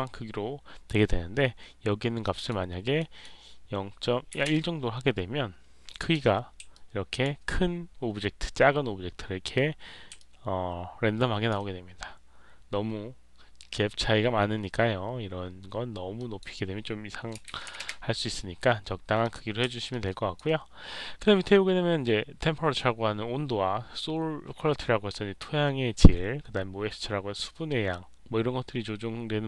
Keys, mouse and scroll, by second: 2.2 click, 2.9 click, 5.9 click, 6.6 alt+click, 10.1-11.4 drag, 16.1 click, 19.1 click, 19.8 alt+click.